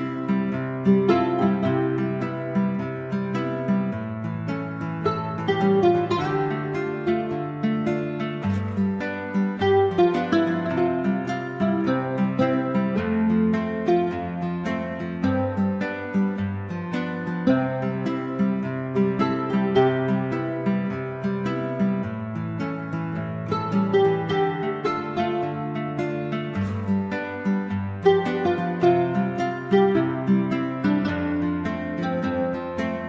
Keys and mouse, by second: 1.1 a, 2.1 ctrl+c, 2.8 i, 3.2 click, 3.4 ctrl+v, 3.8 drag, 4.2 middle click, 4.3 right click, 4.6-5.7 drag, 6.0 i, 6.3 click, 6.5 ctrl+v, 8.3 ctrl+c, 9.2 ctrl+v, 15.3-16.3 drag, 20.3-20.6 middle drag, 20.7 a, 27.1 right click, 27.9-29.3 typing, 28.1 ctrl+z, 29.0 ctrl+z, 31.8 i.